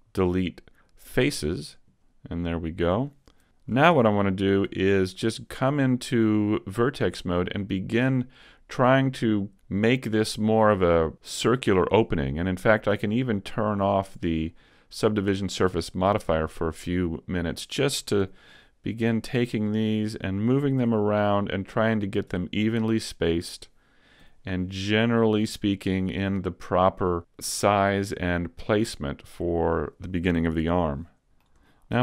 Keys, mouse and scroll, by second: 4.0 ctrl+Tab, 4.7 ctrl+Tab, 13.6 click, 17.4 right click, 18.2 g, 19.3 click, 20.0 right click, 20.8 g, 22.4 click, 23.3 right click, 24.2 click, 24.2 g, 26.3 click, 27.0 right click, 27.5 g, 29.0 click, 29.8 right click, 30.6 g, 31.0 middle click, 31.7 shift+middle click.